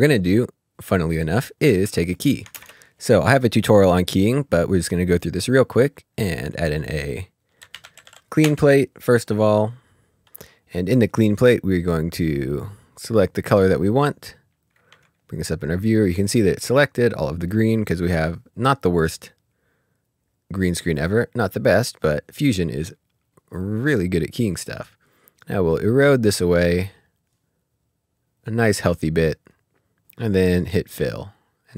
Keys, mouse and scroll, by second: 0.1 click, 2.5 ctrl+space, 7.7-8.0 typing, 8.4 Return, 9.7 Return, 10.2 Escape, 10.3 click, 12.2 click, 14.9 click, 15.2 typing, 17.5 middle click, 18.7 scroll down 1, 19.0 scroll up 1, 19.4 scroll down 1, 21.0-22.9 scroll down 1, 22.9 click, 25.0 click, 30.2 click.